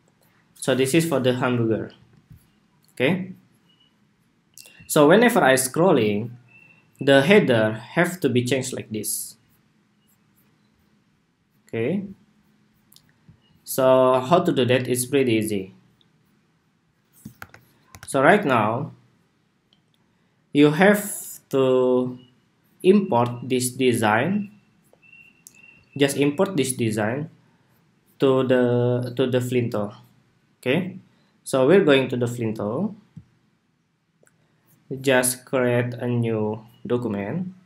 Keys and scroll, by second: 1.7 super+s, 17.0 super+-, 17.6 super+-.